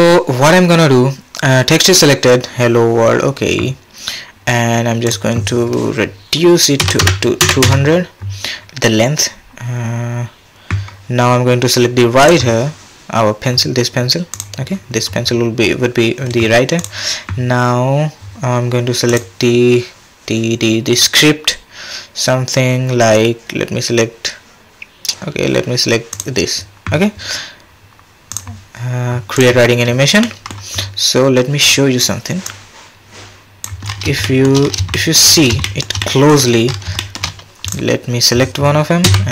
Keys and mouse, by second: 17.0-26.5 drag, 28.5-29.8 drag, 30.3 middle click, 31.7-33.6 drag, 34.2 shift+drag, 34.9 shift+drag, 35.6 shift+drag, 36.0 middle drag, 37.0 shift+click, 39.0 KP_Decimal.